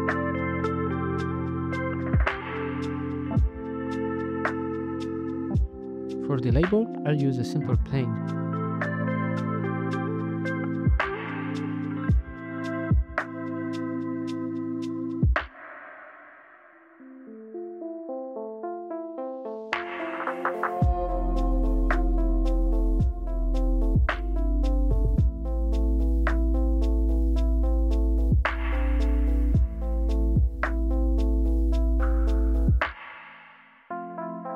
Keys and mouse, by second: 1.0 KP_Divide, 4.1 z, 5.3 shift+a, 6.2 KP_1, 6.8 m, 8.0 BackSpace, 8.4 t, 9.2 click, 9.3 right click, 10.6-14.6 typing, 12.1 Return, 12.4 alt+z, 14.3 ctrl+z, 15.1 Tab, 15.6 Tab, 16.4-17.7 typing, 16.8 click, 18.1 middle click, 18.5 Tab, 18.7 shift+a, 19.3 alt+z, 19.6 alt+z, 19.8 KP_1, 20.6 g, 20.8 y, 21.3 KP_Decimal, 23.1 drag, 23.6 click, 24.1 g, 24.1 x, 25.1 x, 25.3 y, 26.9 g, 26.9 y, 29.5 click, 33.7 z.